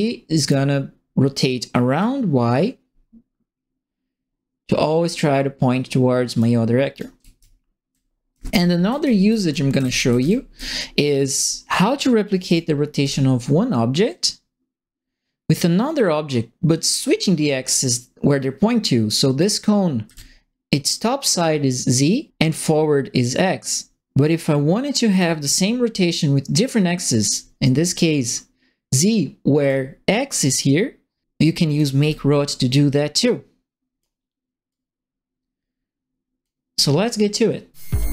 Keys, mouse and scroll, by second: 1.9-6.3 drag, 6.9-10.5 right drag, 7.1-10.6 typing, 12.4 click, 13.0 e, 14.0-19.3 drag, 20.0 w, 23.6-25.1 drag, 27.2 click, 29.6 click, 31.7 click, 31.9 e, 33.1 click, 34.6-36.4 drag.